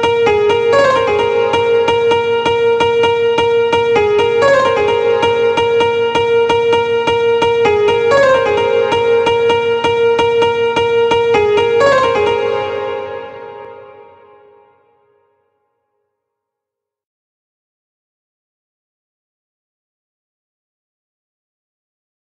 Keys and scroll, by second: 13.1 space, 16.5 ctrl+a, 17.9 ctrl+c.